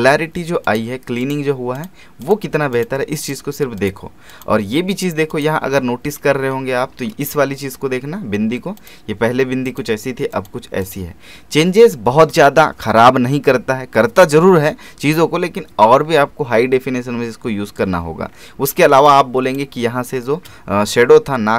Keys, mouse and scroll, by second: 0.6 click, 6.4 alt+space, 6.5 alt+scroll up 1, 8.8 click, 17.8-18.3 scroll down 1, 19.0 click, 19.3 space, 19.8 scroll down 1.